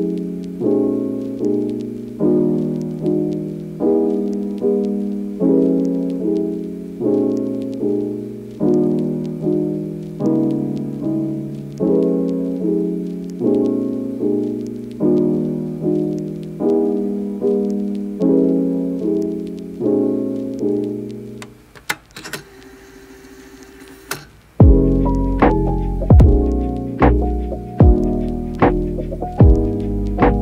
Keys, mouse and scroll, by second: 0.0 click, 2.1 click, 2.6 click, 7.3 click, 8.8 click, 9.0 click, 9.8 click, 11.6 click, 13.8 click, 14.0 click, 15.2 click, 16.8 click, 17.5 click, 18.4-19.6 drag, 22.5 click, 25.1 click, 25.7 middle click, 25.9 click, 26.8 middle click, 29.4 click.